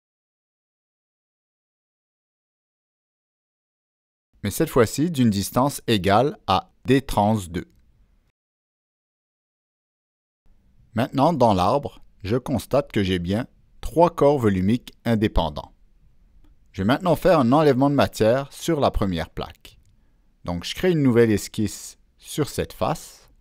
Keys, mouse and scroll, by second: 0.1 click, 2.2 click, 3.3 click, 4.0 click, 9.8 click, 11.5 click, 14.2 click, 15.6 click, 19.2-19.5 scroll up 1, 19.5 click, 20.0 scroll down 1, 21.0 click, 23.1 click.